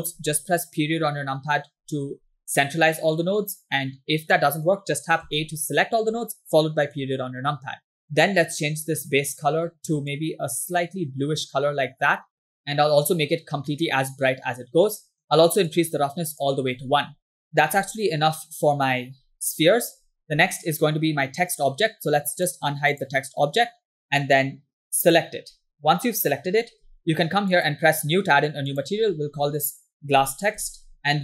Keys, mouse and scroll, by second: 0.0 scroll up 1, 1.0 KP_Decimal, 2.3 scroll up 1, 2.5 middle click, 3.8-4.4 scroll down 2, 4.5 middle click, 5.4 a, 8.1-8.4 scroll up 5, 8.5 click, 15.0 middle click, 15.7 click, 23.0 click, 25.1 click, 27.0 w, 27.6 click, 28.7-31.0 drag, 31.0 s.